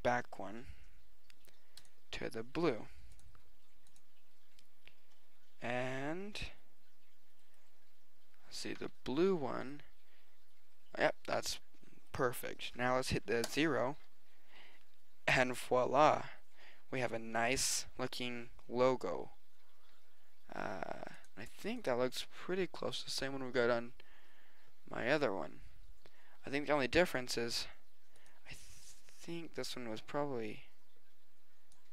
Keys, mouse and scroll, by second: 1.8-3.5 drag, 5.5 click, 7.7-8.4 drag, 13.5 KP_0, 27.1-28.2 drag, 28.2-29.9 middle drag.